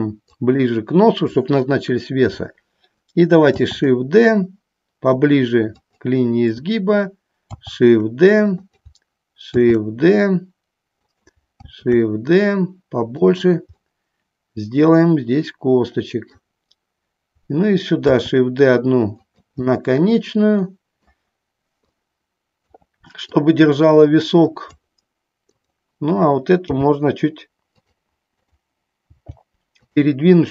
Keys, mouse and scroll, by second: 0.5 click, 3.8 shift+d, 6.1 click, 7.7 shift+d, 8.8 click, 11.2 click, 13.4 click, 14.1-16.4 middle drag, 18.3 shift+d, 19.4 click, 19.8-21.2 middle drag, 22.2 click, 23.4-24.9 drag, 25.5 click, 26.9 g, 27.9 click, 28.5 click, 29.3 g, 29.9 click.